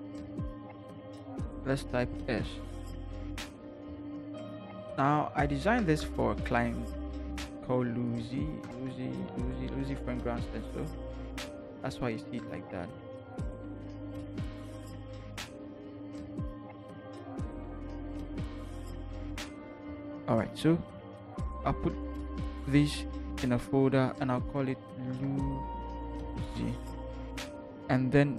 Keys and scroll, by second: 1.5 s, 3.2 v, 5.8 t, 8.6 Return, 8.9 v, 9.3 Up, 9.5 Up, 9.7 Up, 9.8 Up, 10.1 Up, 10.2 Up, 10.4 Up, 10.5 Up, 10.6 Up, 11.3 Left, 11.4 Left, 11.7 Left, 11.8 Left, 11.9 Left, 12.9 ctrl+t, 16.1 shift+Return, 16.6 shift+Left, 17.6 Left, 18.4 Up, 19.0 Up, 19.5 Left, 22.5 ctrl+g, 24.8-26.9 typing.